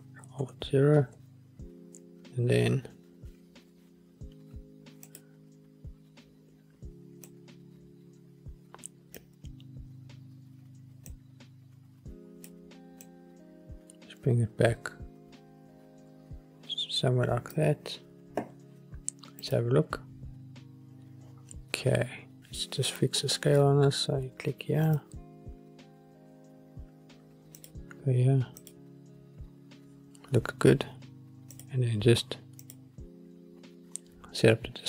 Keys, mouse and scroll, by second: 0.6 ctrl+alt+KP_0, 5.2 click, 7.4-9.3 drag, 11.2-12.6 drag, 13.2-17.8 drag, 19.7 click, 25.0 click, 27.7 click, 28.7 click, 31.6-33.3 drag.